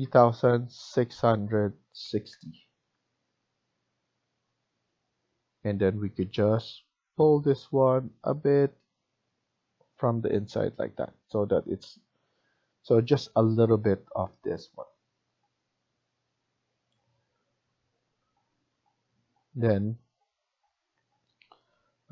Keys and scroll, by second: 0.0-2.2 typing, 2.7 Return, 5.0 Escape, 10.2 Escape.